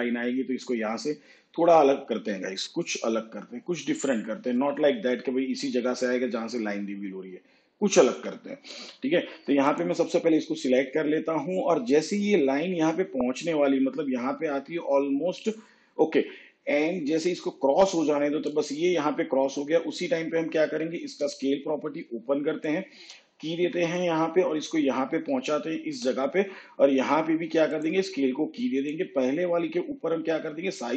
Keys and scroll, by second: 21.1 s.